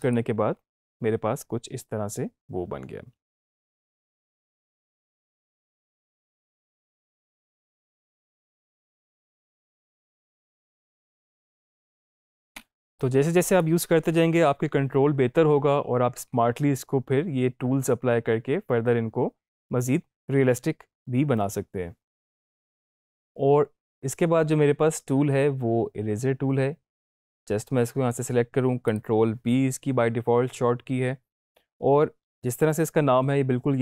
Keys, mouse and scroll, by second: 4.0 space, 12.5 space, 12.9-13.9 drag, 28.9 click.